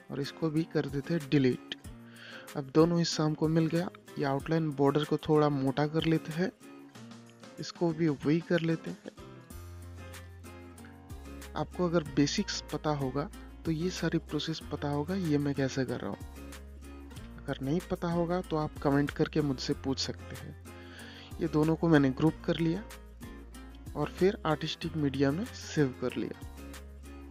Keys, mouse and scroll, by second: 0.8 scroll down 1, 2.4 scroll up 1, 3.4 click, 5.5 3, 7.0 click, 9.5 click, 11.2 3, 12.1 scroll down 1, 13.5-15.9 drag, 15.9 ctrl+g, 16.5 click, 17.0 scroll up 1, 17.7 click, 20.3 i, 21.6 click, 23.1 i, 23.5 Return, 24.4 click, 26.1 scroll down 1.